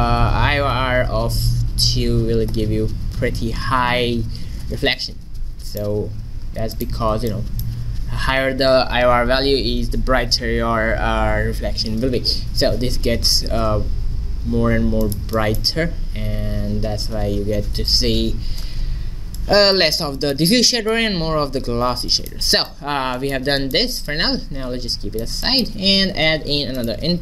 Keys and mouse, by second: 5.1 middle click, 5.5 middle click, 6.3 middle click, 6.8-8.7 drag, 9.0 middle click, 15.1 click, 15.5-16.8 middle drag, 21.1 middle click, 22.7 click, 24.1-27.2 drag, 25.8 shift+a.